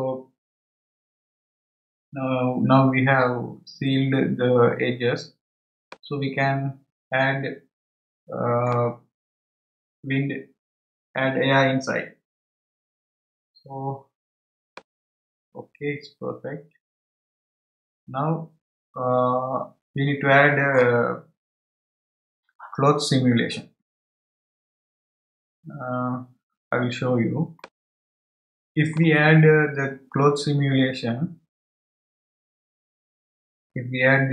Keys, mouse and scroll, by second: 5.3-5.8 scroll down 1, 5.8-8.9 middle drag, 13.4-14.7 scroll down 4, 14.7-17.8 middle drag, 25.5-25.9 scroll up 1, 27.6-30.6 middle drag.